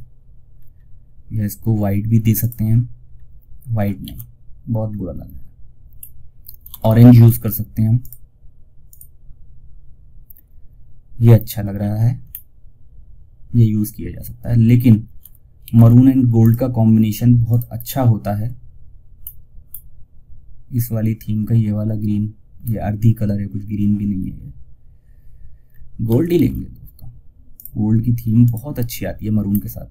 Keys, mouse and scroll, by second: 0.1-0.4 scroll down 1, 1.7 click, 2.4-2.8 scroll down 1, 3.2 ctrl+scroll down 1, 3.3 ctrl+z, 4.2 scroll down 1, 5.5-6.3 scroll up 3, 6.3 alt+shift+s, 7.3 shift+click, 10.5 shift+scroll down 1, 11.9 shift+scroll up 1, 14.5 shift+scroll up 1, 14.9 ctrl+alt+shift+s, 15.7 click, 18.5 scroll up 1, 21.9 scroll up 1, 23.7 scroll down 1, 25.6 ctrl+alt+shift+s, 26.8 click, 28.7-29.0 scroll up 1.